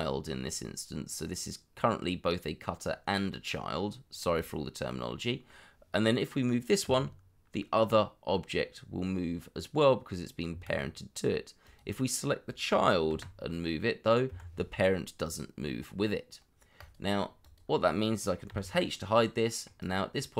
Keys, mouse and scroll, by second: 5.0 middle click, 6.8 g, 10.5 Escape, 13.1 g, 14.2 Escape, 18.5 h, 18.9 middle click.